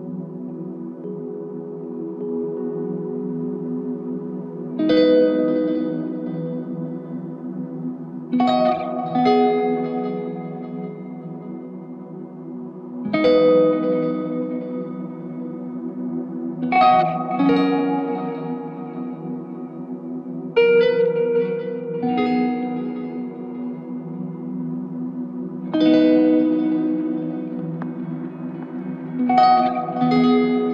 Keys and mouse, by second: 2.7 alt+click, 3.6 shift+click, 5.0 shift+click, 9.1 alt+click, 11.0 f, 11.8 shift+click, 15.9 ctrl+z, 16.6 alt+click, 18.6 ctrl+alt+click, 23.1 double click, 25.9 double click.